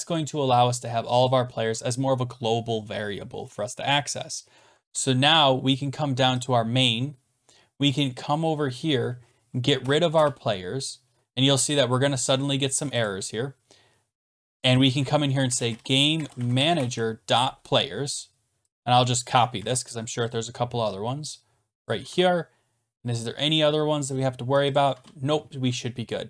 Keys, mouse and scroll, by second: 1.3 click, 4.8 ctrl+s, 6.4 click, 7.5-9.0 scroll, 9.0-9.8 scroll, 9.8 BackSpace, 9.9 scroll down 10, 10.1 BackSpace, 13.0 click, 14.6 click, 15.2-17.4 typing, 18.7 shift+click, 19.6 ctrl+c, 20.3 click, 21.9 click, 22.1 ctrl+v, 24.8 click, 24.9 ctrl+s.